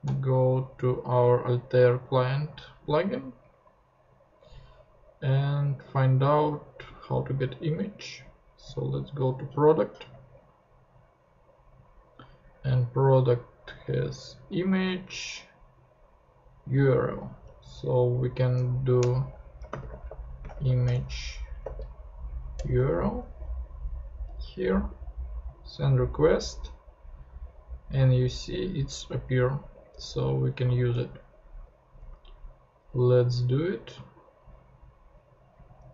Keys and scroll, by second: 19.0 Return, 19.4-21.6 typing, 20.9 shift+Return, 22.5 Return, 30.7 super+c, 30.9 super+Tab.